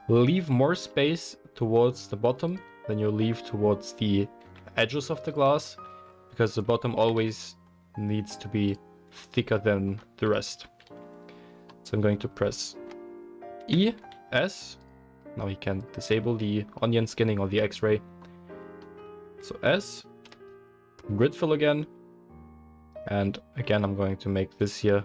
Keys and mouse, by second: 2.5 s, 4.4 s, 6.9 g, 13.6 e, 15.8-19.9 drag, 19.2 s, 19.9-22.8 middle drag, 20.3 F3, 22.8 alt+click, 23.1-24.4 alt+middle drag, 24.4 alt+shift+drag, 24.7-25.0 alt+shift+middle drag.